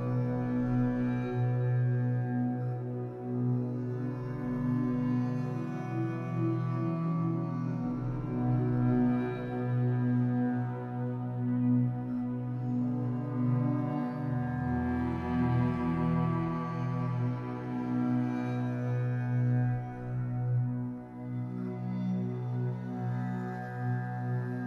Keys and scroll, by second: 0.0 3, 1.0 shift+Tab, 1.7 Escape, 3.7 5, 6.1 3, 7.1 m, 11.6 Escape, 12.8 4, 22.9 Escape.